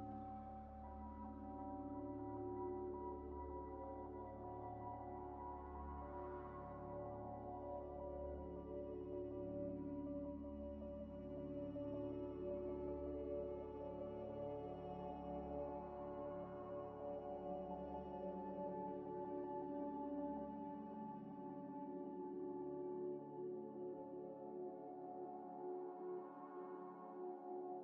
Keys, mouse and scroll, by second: 0.8 double click, 1.4 middle click, 4.1-7.0 typing, 4.8 ctrl+ئ, 6.5 click, 8.0 scroll up 1, 8.3 scroll down 1, 8.5 ئ, 9.4 ئ, 9.9 alt+ئ, 10.4 Escape, 11.1 Escape, 13.4 double click, 16.1 double click, 16.1 scroll up 1, 20.7 z, 21.8 Tab, 22.4 Tab, 24.2 scroll up 1.